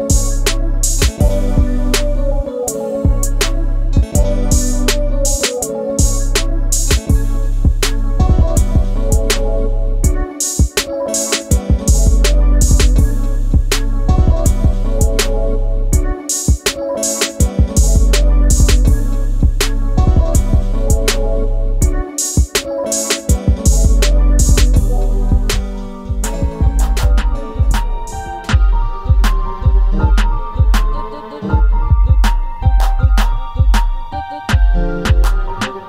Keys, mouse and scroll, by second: 2.9 g, 5.4-6.8 drag, 6.8 shift+d, 8.1 click, 12.3 shift+click, 13.9 shift+d, 15.2 r, 17.0 KP_0, 18.1 click, 18.3-18.6 scroll up 2, 19.0 click, 19.6-20.8 scroll down 1, 20.8 click, 22.1-23.7 scroll up 1, 25.7 click.